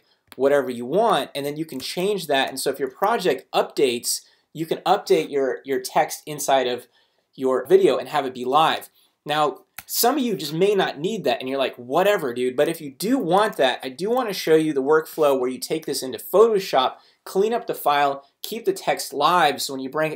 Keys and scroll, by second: 1.8 Return, 2.4 super+Return, 9.8 BackSpace.